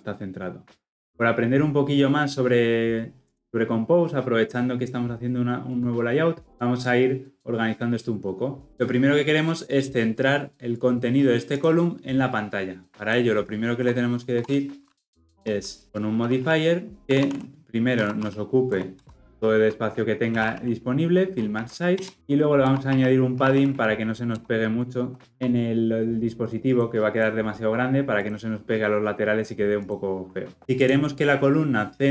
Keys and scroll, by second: 17.0 Return.